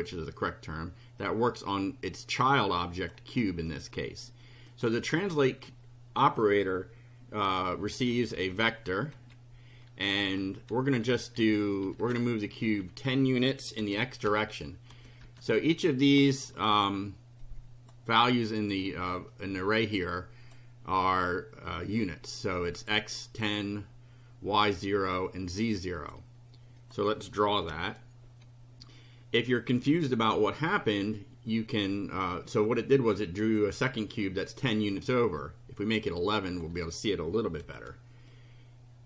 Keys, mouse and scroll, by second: 1.2-3.2 drag, 3.7 click, 4.7 click, 8.1 [, 8.4 ], 9.1 Left, 11.9 KP_1, 12.1 KP_0, 13.8 ,, 14.2 KP_0, 15.0 ,, 15.2 KP_0, 17.4 click, 18.2 click, 19.3-20.7 drag, 26.0 click, 26.8 click, 27.6 F5, 32.6-33.8 drag, 34.4 click, 36.0 click, 36.6 1, 37.6 F5, 38.3-39.0 drag.